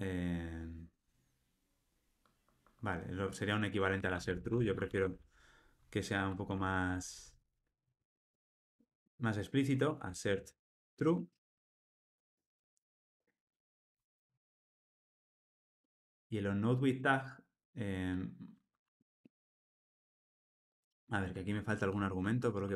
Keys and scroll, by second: 2.3 alt+super+[, 11.5 Escape, 12.8 alt+Return, 22.0 super+j, 22.2 super+p.